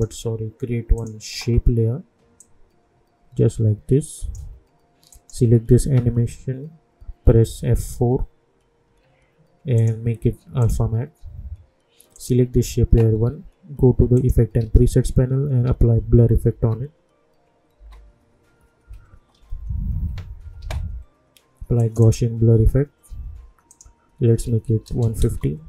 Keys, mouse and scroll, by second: 8.8 F4, 9.7 click, 14.5 ctrl+a, 15.4-17.7 typing, 20.6 r, 21.7 click, 25.2 Return.